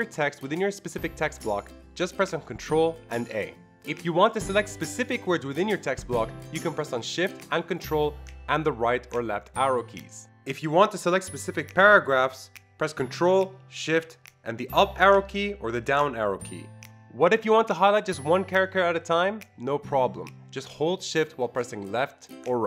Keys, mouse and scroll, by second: 0.4 click, 1.2 ctrl+a, 1.9 click, 2.6 ctrl+a, 3.5 click, 3.7 click, 3.9 ctrl+shift+Right, 4.2 ctrl+shift+Right, 4.4 ctrl+shift+Right, 4.7 ctrl+shift+Right, 5.1 ctrl+shift+Right, 6.4 ctrl+shift+Right, 6.9 ctrl+shift+Left, 7.1 ctrl+shift+Left, 7.5 ctrl+shift+Left, 8.2 ctrl+shift+Left, 8.4 ctrl+shift+Left, 9.1 ctrl+shift+Left, 10.2 Up, 10.3 ctrl+shift+Down, 10.8 ctrl+shift+Down, 11.2 ctrl+shift+Down, 11.6 ctrl+shift+Down, 12.4 ctrl+shift+Down, 14.0 ctrl+shift+Down, 14.4 ctrl+shift+Up, 14.7 ctrl+shift+Up, 15.5 ctrl+shift+Up, 15.8 ctrl+shift+Up, 16.8 click, 17.4 shift+Right, 17.6 shift+Right, 17.9 shift+Right, 18.6 shift+Right, 19.1 shift+Right, 19.2 shift+Right, 19.5 shift+Right, 19.6 shift+Right, 20.0 shift+Right, 20.2-20.9 shift+Right, 22.0 shift+Right, 22.4 shift+Left.